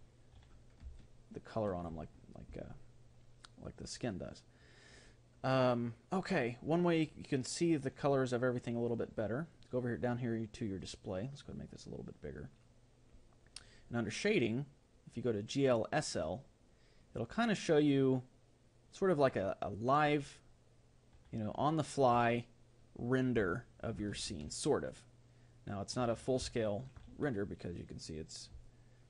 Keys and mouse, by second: 0.9-3.0 middle drag, 6.1-7.7 middle drag, 8.0-11.5 middle drag, 10.6-13.5 drag, 12.3-14.4 middle drag, 14.4-18.1 drag, 23.5-29.0 middle drag.